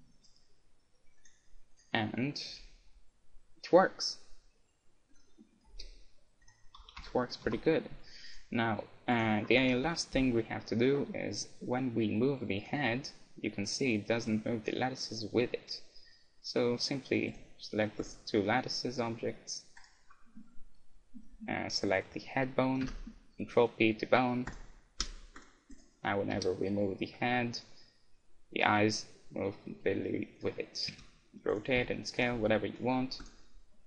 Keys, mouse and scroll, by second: 1.2-3.7 right drag, 2.5 g, 5.2-6.4 drag, 5.6 right click, 5.9 g, 6.8 ctrl+z, 7.0 ctrl+z, 7.5 ctrl+z, 7.5 click, 7.9 a, 8.4 right click, 8.6-10.5 middle drag, 9.9 KP_1, 10.5 right click, 12.9 g, 16.5-19.8 right drag, 16.8-18.6 middle drag, 21.4 right click, 22.9 ctrl+p, 25.0-27.5 right drag, 26.4 g, 30.6-33.8 right drag, 31.0 r, 31.9 s, 33.5 click.